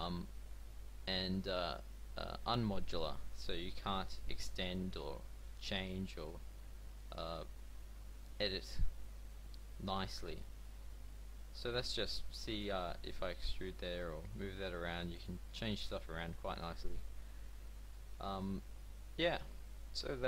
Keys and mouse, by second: 6.6 a, 6.9 b, 8.7 z, 9.2 b, 10.2 z, 10.6 g, 13.7 g, 15.4 Tab, 17.4 a.